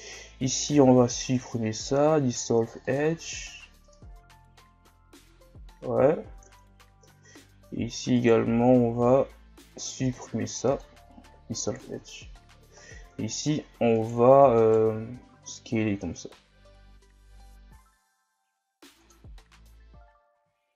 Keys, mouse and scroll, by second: 0.7 x, 3.9 Tab, 4.2 scroll down 4, 5.3-6.1 scroll up 2, 6.1-6.5 shift+scroll down 3, 6.5 Tab, 7.4 scroll up 3, 8.2 alt+right click, 8.9 x, 11.5 scroll down 2, 11.9 Tab, 12.5 scroll up 3, 12.7 Tab, 13.3 alt+right click, 14.6 alt+right click, 15.3 s, 19.3 scroll down 4, 19.6 Tab, 20.3 a.